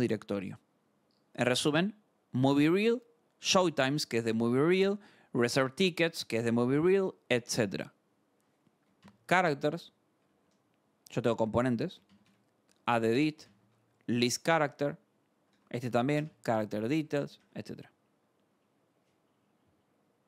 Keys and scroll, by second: 0.3 scroll, 2.5-4.3 scroll, 8.5-13.9 typing, 9.5 Escape, 9.7 Return, 11.4 Return, 14.7 Return, 15.4-17.4 typing, 15.5 Return, 17.0 Escape.